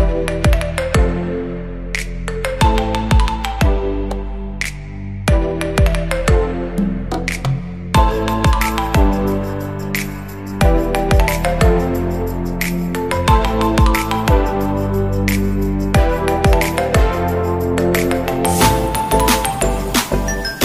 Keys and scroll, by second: 3.9 shift+Num_Lock, 16.0 ctrl+z, 17.0 ctrl+alt+z.